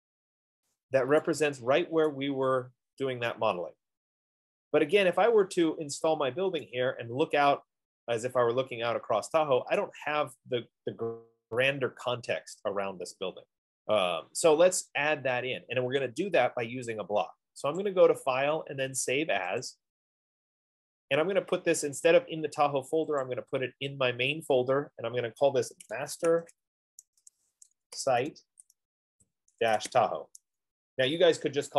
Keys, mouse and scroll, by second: 0.9 right click, 2.5 right click, 5.0 scroll, 5.7-6.6 scroll, 9.7 scroll down 7, 10.1 right click, 10.5-10.8 scroll down 2, 13.0 scroll down 1, 13.1 scroll, 18.2 click, 20.1 click, 23.9 click, 26.5-30.8 typing, 29.2-31.4 drag.